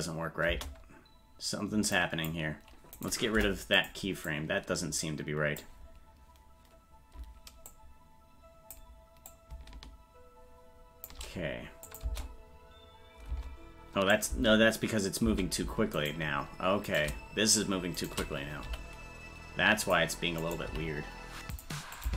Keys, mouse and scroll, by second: 1.9 click, 1.9 space, 2.9 click, 4.3-5.3 right drag, 5.3 click, 7.6-8.7 drag, 9.3-12.0 drag, 14.1 click, 15.9 right click, 15.9 space, 16.8 right click, 18.0 shift+right click, 18.6 g, 20.4 right click, 20.6 g, 22.0 click.